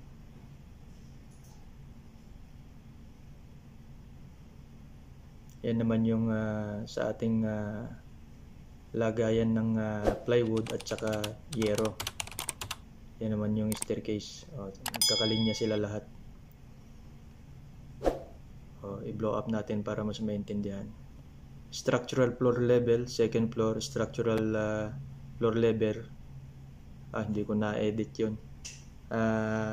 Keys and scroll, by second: 0.7 shift+3, 2.9 Escape.